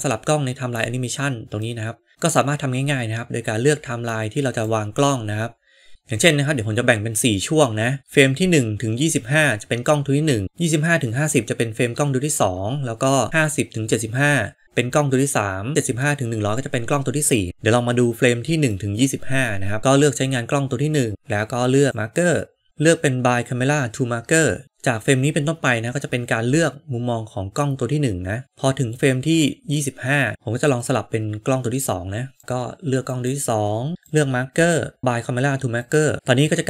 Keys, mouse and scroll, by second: 1.7-4.5 drag, 5.9-17.5 drag, 18.7 middle click, 21.9-22.9 drag, 25.1-30.3 drag, 32.3 click, 34.1-35.0 drag, 35.6 click, 36.1-36.6 drag.